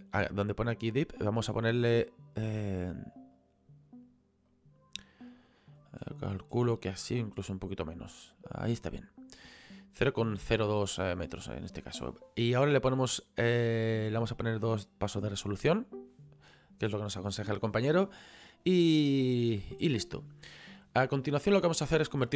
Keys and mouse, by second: 2.7 click, 4.5 click, 6.0 middle click, 7.7 click, 14.2 click, 15.6 middle click.